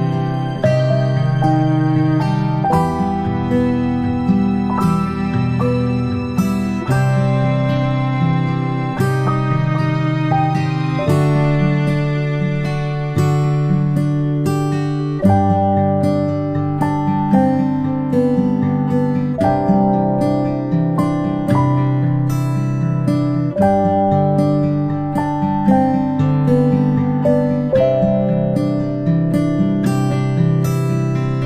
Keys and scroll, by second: 0.7 m, 1.7 g, 20.0 ctrl+p.